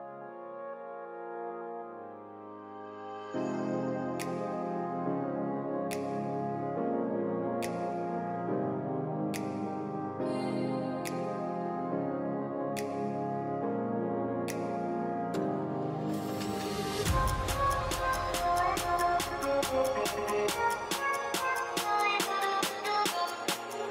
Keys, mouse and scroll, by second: 0.3 Return, 1.1-1.4 alt+scroll up 1, 2.3-2.8 scroll down 1, 10.3-10.6 scroll down 1, 10.6-12.1 scroll up 1, 14.1-14.8 typing, 16.0 typing, 18.5-19.4 typing, 21.9 typing.